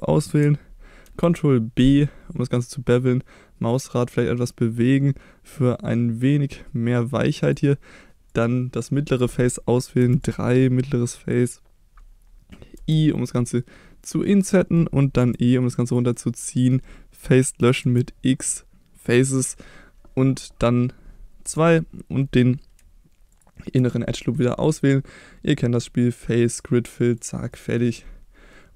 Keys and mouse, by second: 1.1 ctrl+b, 7.4 click, 8.3 click, 10.0 3, 10.2 click, 12.8 i, 14.0 click, 14.4 middle click, 15.2 e, 15.9 click, 16.1 middle click, 17.8 x, 21.5 2, 23.3 click, 24.2 middle click, 25.5-26.6 drag, 27.2 click, 27.5 middle click, 28.5 middle click.